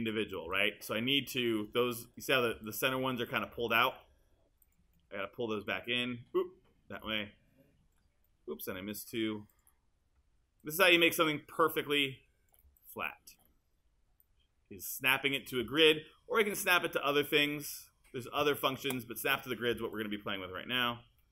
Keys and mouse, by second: 4.6-9.1 shift+drag, 9.6 click.